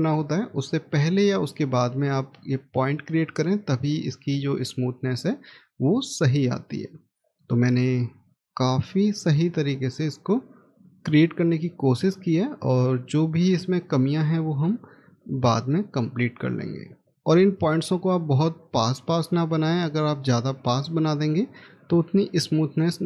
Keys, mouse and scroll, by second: 6.9-7.4 scroll down 1, 7.5 middle click, 15.9 middle click, 17.0 scroll down 1, 20.3 middle click.